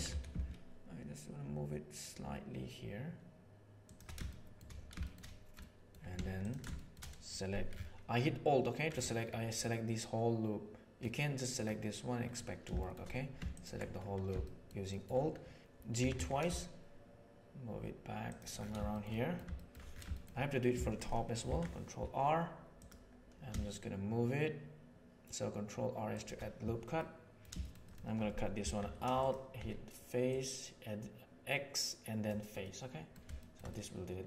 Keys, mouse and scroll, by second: 4.2 shift+middle click, 5.5 middle click, 6.3 alt+right click, 6.6 shift+middle click, 9.5-10.9 middle drag, 12.7 shift+middle click, 14.3 shift+middle click, 14.7 shift+middle click, 15.9 g, 18.9 shift+middle click, 19.5 shift+middle click, 21.3 ctrl+r, 26.9 middle click, 28.7 3, 29.1 click, 29.5 x, 32.5 middle click, 33.3-34.2 shift+middle drag.